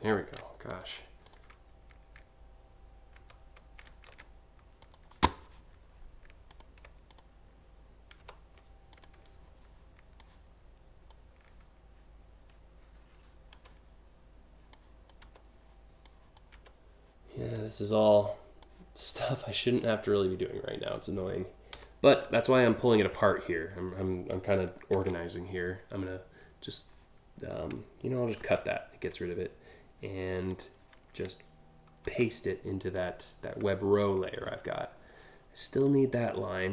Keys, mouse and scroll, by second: 0.3 ctrl+shift+z, 0.9 click, 2.8 ctrl+z, 4.8 click, 6.1 ctrl+click, 6.7 click, 7.9 Delete, 8.5 click, 9.8-10.7 drag, 13.1 Delete, 14.3-14.8 drag, 14.9 Delete, 15.7-16.0 drag, 16.2 Delete, 17.2-17.6 drag, 18.2-18.6 drag, 18.8 Delete, 21.4 a, 21.7 click, 22.5 ctrl+click, 24.5 ctrl+c, 28.0 ctrl+x, 30.1 click, 31.7 ctrl+v, 32.5 click, 35.4 click, 35.7 click.